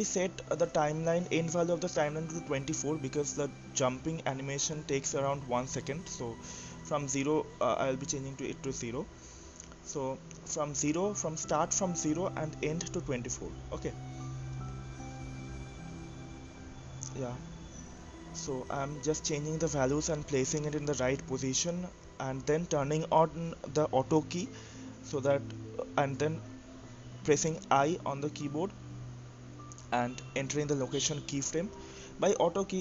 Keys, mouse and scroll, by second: 3.8-4.1 scroll up 3, 4.1-5.4 middle drag, 5.4-8.0 scroll up 21, 6.4-9.6 drag, 8.0 scroll up 1, 9.6-10.7 middle drag, 10.7-11.3 scroll down 1, 11.3-12.3 middle drag, 12.3-12.8 scroll up 1, 12.8-14.4 middle drag, 14.4-20.6 drag, 21.1-22.4 drag, 22.9-24.7 drag, 28.6 click, 31.1 i, 32.2 i.